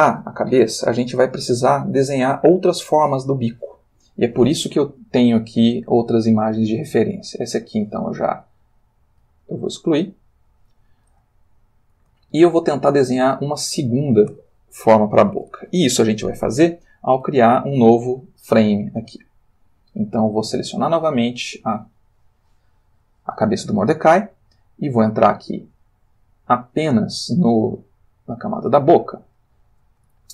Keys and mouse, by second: 8.0 click, 9.2 x, 10.2 click, 11.4 ctrl+middle click, 12.6-14.2 ctrl+shift+middle drag, 20.7 click, 26.1 click, 29.2 click, 30.2-30.3 ctrl+middle drag.